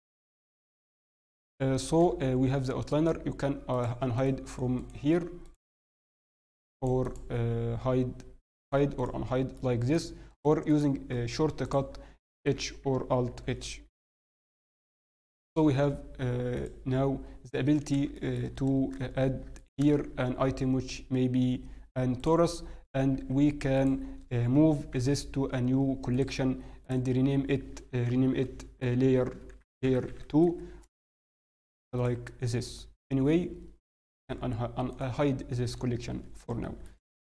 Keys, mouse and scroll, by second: 3.7 shift+middle click, 3.7-9.5 click, 9.5 middle click, 10.0-10.6 scroll up 1, 10.6 right click, 11.6 click, 11.6 scroll up 8, 11.9-12.4 scroll down 1, 12.4 h, 13.2 alt+h, 13.2-14.4 scroll down 4, 14.7 scroll down 1, 16.5 click, 17.8 scroll down 1, 18.1 shift+middle click, 18.4-18.8 scroll up 1, 19.5 shift+right click, 19.9-20.6 scroll up 2, 19.9 shift+a, 22.9-23.9 scroll down 2, 23.1 s, 24.0-24.9 scroll up 1, 24.9 m, 32.8-33.1 scroll down 1, 34.1 click, 34.1-34.5 scroll down 2, 35.9-36.6 scroll up 1, 36.6 click, 36.6 shift+middle click, 36.9 scroll up 3, 37.1 scroll down 1.